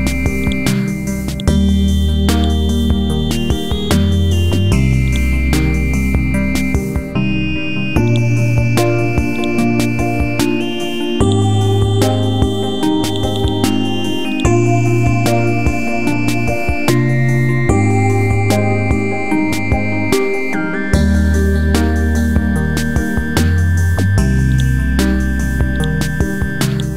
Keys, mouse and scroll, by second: 3.4 alt+Up, 3.9 alt+Up, 4.5 scroll down 1, 5.1 click, 5.4 scroll down 1, 6.1 scroll up 1, 6.5 scroll down 1, 7.2 scroll up 1, 8.1 click, 9.3-10.7 drag, 11.2 right click, 13.1 click, 15.4 scroll up 1, 16.4 Left, 16.9 typing, 20.3 Down, 20.7-21.1 typing, 23.0-23.5 scroll down 1, 23.6 scroll up 1, 24.5 click, 25.7 shift+click, 26.7 right click.